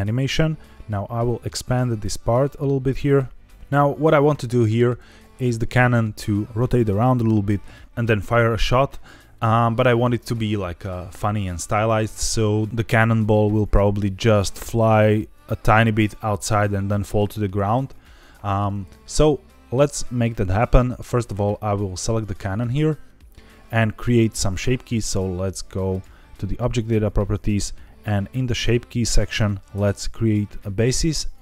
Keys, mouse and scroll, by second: 1.2 click, 1.9-3.0 drag, 21.1 click, 22.2 scroll up 2, 22.6-23.2 shift+middle drag, 25.8 click, 29.7 click.